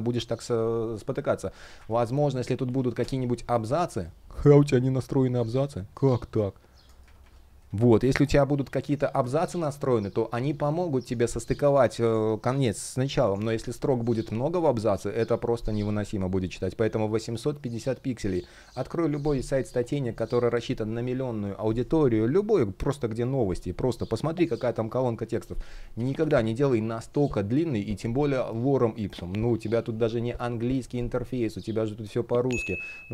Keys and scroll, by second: 2.6 Return, 4.3 super+BackSpace, 4.9 super+\, 5.0 super+Return, 5.3 super+Return, 6.7 shift+Up, 8.2 super+Return, 8.7 super+\, 25.6 super+z.